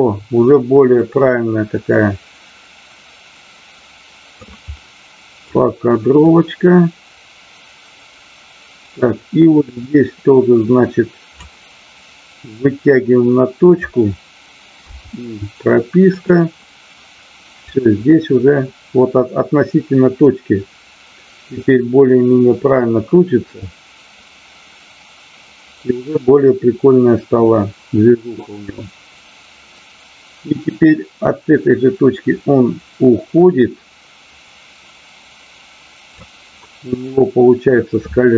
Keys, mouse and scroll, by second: 4.8-5.5 middle drag, 6.1-11.5 drag, 12.6-13.9 drag, 16.1 click, 17.6-36.3 drag, 36.6-37.8 middle drag.